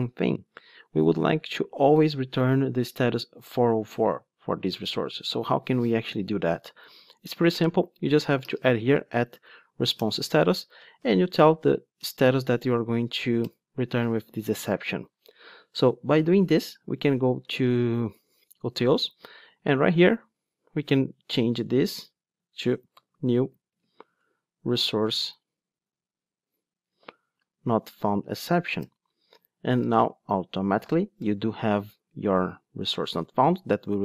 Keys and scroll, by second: 10.0 Return, 28.9 Return.